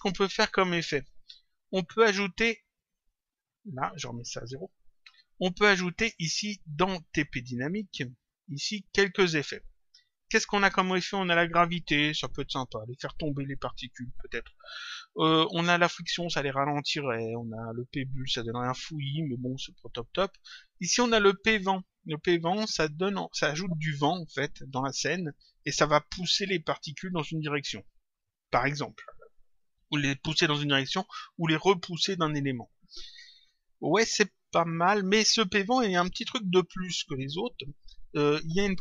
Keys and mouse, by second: 1.9 click, 4.0 click, 7.8 click, 21.2 click.